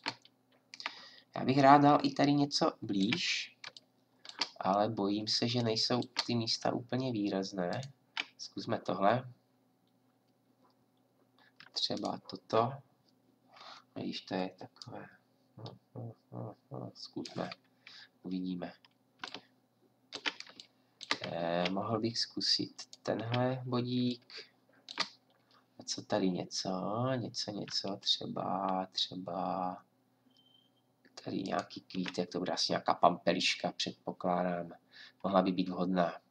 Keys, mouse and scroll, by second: 22.7-24.5 drag.